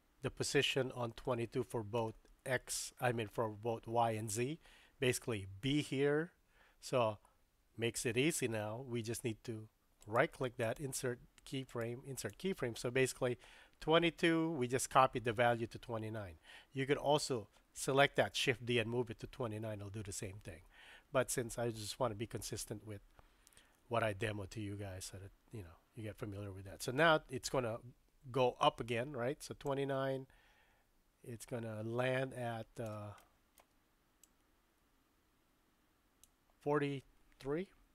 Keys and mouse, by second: 10.0 right click, 11.6 right click, 29.7-32.9 drag, 33.4 shift+middle click, 34.2-36.7 drag, 37.7 Left.